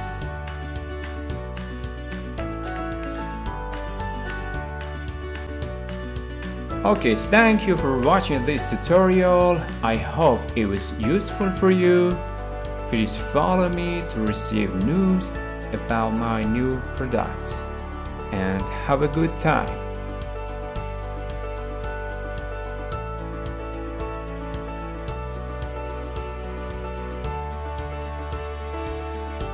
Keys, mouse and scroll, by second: 0.7-1.9 middle drag, 2.8 click, 3.5-3.8 scroll, 19.4 click, 20.1 click.